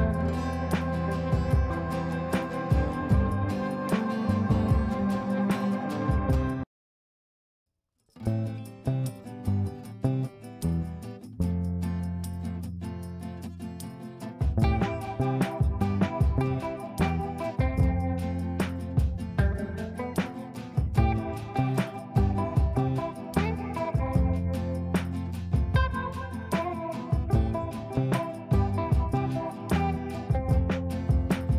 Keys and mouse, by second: 5.0 click, 5.6 ctrl+click, 7.1 ctrl+r, 7.8 ctrl+click, 8.2 ctrl+r, 9.1 ctrl+click, 9.5 ctrl+r, 10.1-10.7 click, 10.9 F3, 11.9-15.7 drag, 18.0 t, 24.7 click, 25.3 F2, 25.8-27.9 drag, 30.0 click.